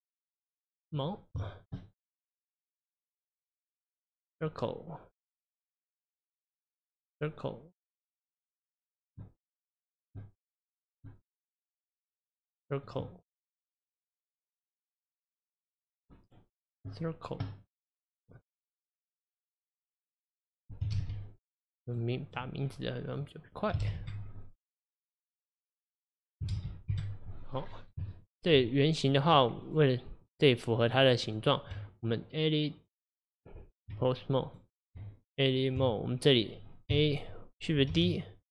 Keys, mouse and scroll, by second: 1.0 click, 1.4-3.5 shift+middle drag, 3.5 click, 6.1 click, 6.9 click, 8.5 click, 9.9 click, 11.8 click, 12.9 click, 14.7-15.5 scroll up 2, 15.5 click, 16.7 click, 18.2 click, 20.0-22.0 drag, 22.3 click, 23.1 click, 23.5-25.0 drag, 25.2 click, 26.2-27.7 drag, 27.7 scroll down 1, 28.1-29.1 shift+middle drag, 29.1 click, 29.6 click, 30.2 click, 30.9 click, 31.3 click, 31.8 Tab, 34.5 click, 35.0 Tab, 36.9 a, 37.9 shift+d.